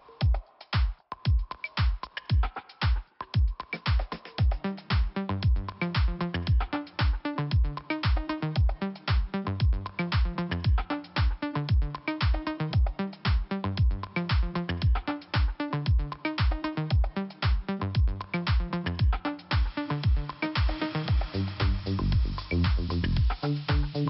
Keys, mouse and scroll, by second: 1.6 click, 1.6 click, 1.9 Delete, 3.2 click, 3.9 scroll up 1, 4.9 right click, 5.8 click, 7.0 click, 7.8 click, 9.9 click, 11.2 click, 11.6 click, 12.1 click, 13.3 scroll down 1, 14.8 click, 14.9 double click, 15.1 double click, 15.6 double click, 17.8 click, 18.9 right click, 19.7 click, 21.3 click, 21.3 click, 22.0 click, 23.9 click.